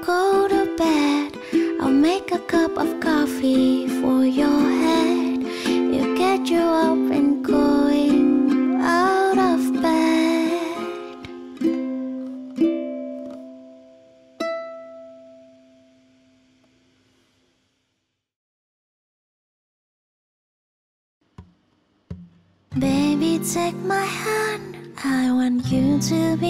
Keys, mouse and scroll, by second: 21.4 0, 25.6 F9.